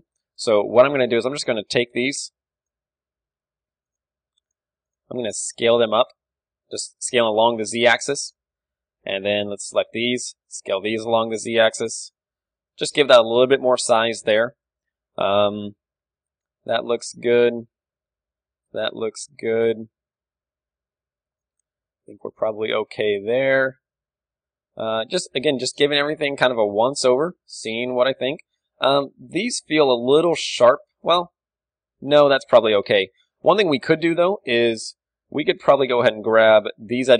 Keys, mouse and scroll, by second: 0.5 Tab, 1.0 Tab, 1.0-2.2 drag, 1.2 a, 2.2-7.8 right drag, 5.4 s, 8.3-10.6 drag, 8.7 a, 9.2-12.0 right drag, 10.6 s, 12.4 Tab, 12.4 click, 13.0-16.9 middle drag, 13.7 a, 18.7 KP_1, 20.5-24.8 middle drag, 27.8 KP_3, 28.6-32.3 middle drag, 28.6 KP_1, 29.4-31.2 drag, 31.3 a, 32.4 a, 32.8 Tab, 32.8-37.0 middle drag, 33.4 z, 33.9 KP_3, 35.2 z, 36.0 z, 37.0-37.1 drag.